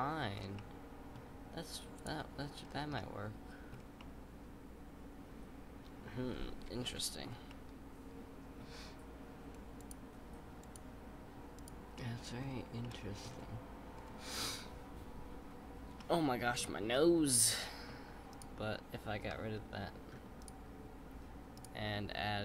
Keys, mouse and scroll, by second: 0.3 scroll down 4, 0.5-2.0 middle drag, 2.0 click, 2.5-2.9 scroll down 3, 2.9-3.7 middle drag, 3.7 scroll up 2, 4.0-6.8 middle drag, 6.8 KP_5, 7.3 scroll down 1, 7.5-9.8 middle drag, 9.8 click, 10.6 click, 11.6 click, 11.9-12.4 middle drag, 12.4-12.8 scroll up 3, 12.8-13.2 middle drag, 13.2-13.9 scroll down 4, 13.9 scroll down 2, 16.0-18.3 middle drag, 18.3 click, 20.0 x, 21.5 click.